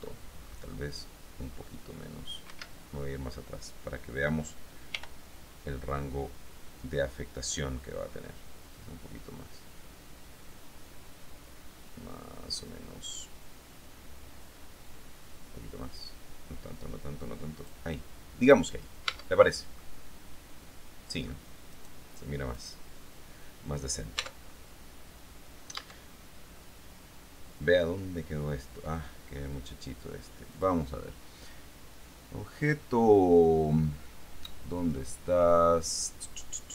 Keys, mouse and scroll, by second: 2.7 Escape, 3.1-3.7 scroll down 1, 5.1 r, 17.7 click, 19.3 Tab, 19.9-21.7 drag, 21.9 right click, 22.7 right click, 24.4 Tab, 26.0 Tab.